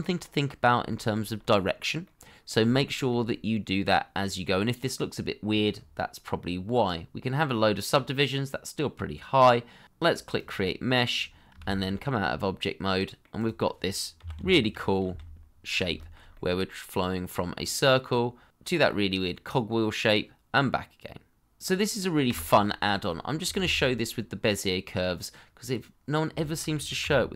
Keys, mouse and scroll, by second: 0.9 shift+middle click, 1.3-1.8 scroll up 1, 2.0 middle click, 2.7 shift+middle click, 5.4-6.0 scroll down 1, 11.1-11.5 scroll down 1, 11.6 shift+z, 11.9 middle click, 14.2 g, 15.0 x, 15.9 shift+middle click, 16.3 middle click, 21.6 Delete, 22.0 shift+middle click, 22.3 scroll up 1, 22.4 middle click, 22.7 shift+middle click, 24.0 Delete, 24.3 middle click, 24.6 shift+a, 26.3 shift+middle click, 27.0 s.